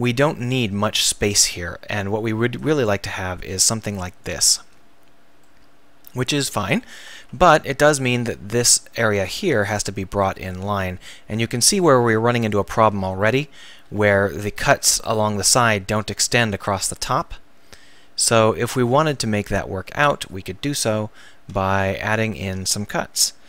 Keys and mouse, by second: 2.6-4.2 drag, 5.0 click, 5.4 middle click, 6.7 KP_1, 7.3 z, 7.7 a, 8.0 b, 10.5-11.6 drag, 13.7 z, 15.3 ctrl+z, 20.3 middle click, 21.6 ctrl+r.